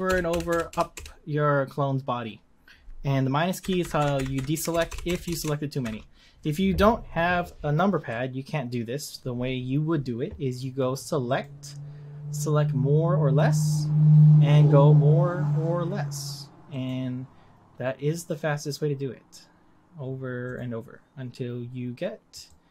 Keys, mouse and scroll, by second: 0.1 ctrl+KP_Add, 0.3 ctrl+KP_Add, 0.5 ctrl+KP_Add, 0.7 ctrl+KP_Add, 0.9 ctrl+KP_Add, 3.6 ctrl+KP_Subtract, 3.8 ctrl+KP_Subtract, 3.9 ctrl+KP_Subtract, 4.1 ctrl+KP_Subtract, 4.3 ctrl+KP_Subtract, 4.5 ctrl+KP_Add, 4.7-5.2 ctrl+KP_Add, 5.4 ctrl+KP_Add, 5.8 ctrl+KP_Subtract, 8.1-11.1 middle drag, 11.2-14.3 drag, 18.1-21.2 drag, 22.3-22.7 drag.